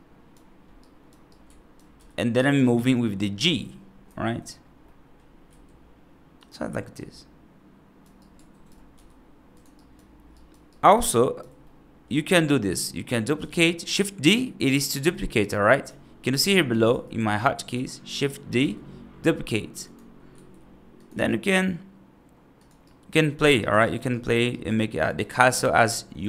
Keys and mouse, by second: 0.7 right drag, 1.2-1.6 alt+right drag, 1.8 g, 3.3 g, 4.7 middle click, 5.3 s, 6.8-7.9 right drag, 8.1-8.5 right drag, 8.8 g, 9.6 right drag, 10.2 right drag, 10.6-11.2 right drag, 11.5-11.9 middle drag, 13.3 shift+d, 18.5 g, 20.2 s, 21.0 g, 22.7-23.3 right drag, 23.5 right drag, 24.0 right drag, 24.4 right drag, 24.9 right click, 25.6 middle drag.